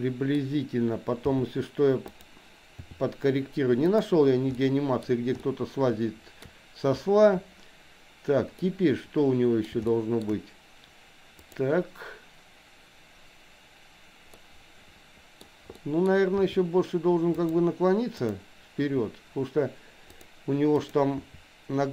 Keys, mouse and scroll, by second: 1.4 g, 2.8 r, 4.5 middle click, 5.4-6.6 shift+middle drag, 8.6-9.8 middle drag, 9.9 shift+middle click, 11.5 click, 14.4-15.4 middle drag, 15.8 middle click, 16.5 r, 18.3 click, 18.8 r, 20.8 click.